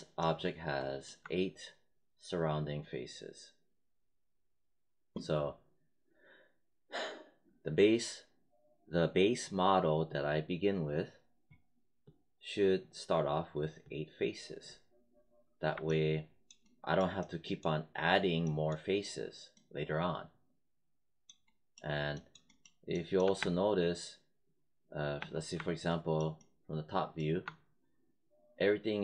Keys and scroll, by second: 23.3 alt+space, 25.1 space.